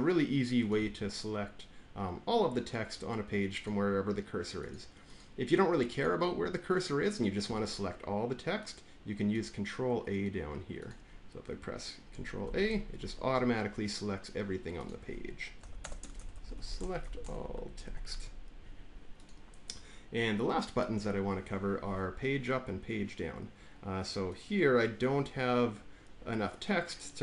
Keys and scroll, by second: 12.3 ctrl+a, 15.4-18.3 typing.